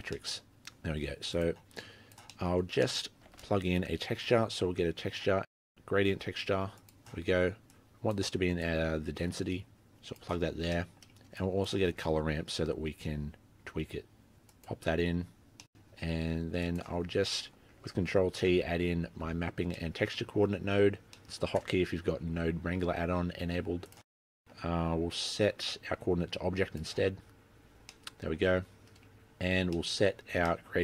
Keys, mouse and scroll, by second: 0.3 middle click, 0.9 middle click, 1.4 click, 1.9 click, 2.4 middle click, 2.9-3.4 scroll up 3, 2.9 middle click, 3.4 shift+a, 7.4-7.9 scroll down 6, 7.8 click, 8.7 click, 10.6 scroll down 3, 10.9 middle click, 11.5 click, 12.0 shift+a, 15.3 scroll down 5, 15.4 middle click, 15.4-16.7 scroll up 7, 15.8 middle click, 16.7 click, 17.1-17.8 scroll down 2, 17.5 middle click, 18.6 ctrl+t, 19.5-20.8 scroll up 6, 19.9 middle click, 21.0 scroll down 4, 21.3 middle click, 21.6-22.4 scroll up 1, 22.4 scroll up 1, 22.4 g, 24.1 middle click, 24.6 click, 24.9 click, 25.7 middle click, 25.9-26.6 scroll up 2, 26.1 middle click, 26.6 click, 28.1 middle click, 28.4-29.0 scroll down 11, 29.0 middle click, 29.4-30.3 scroll up 10, 29.8 middle click, 30.5 middle click.